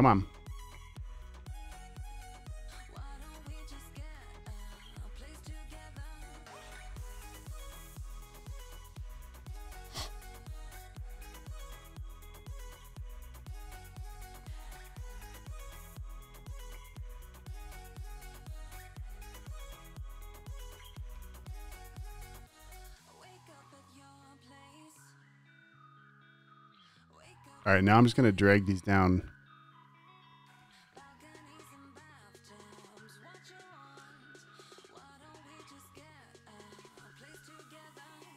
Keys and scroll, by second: 1.6 super+z, 3.9 v, 4.5 BackSpace, 5.2 super+z, 7.8 t, 9.3 super+x, 11.8 super+v, 15.0 super+x, 17.6 super+v, 20.6 super+x, 22.9 super+v.